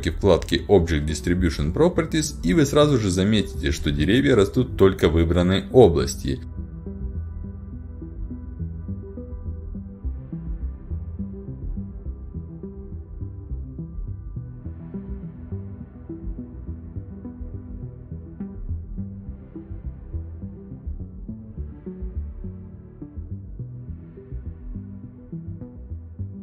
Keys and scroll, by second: 15.2 d, 15.6 e, 17.7 d, 18.7 w, 19.9-20.8 typing, 24.3-25.2 typing.